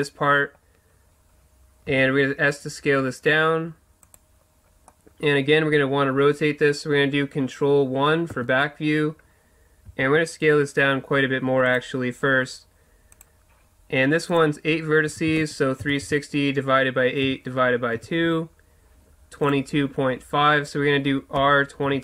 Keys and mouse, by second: 0.0-3.0 middle drag, 1.8 s, 4.9 middle click, 8.3 ctrl+KP_1, 9.8 s, 11.7-14.3 drag, 21.3 r.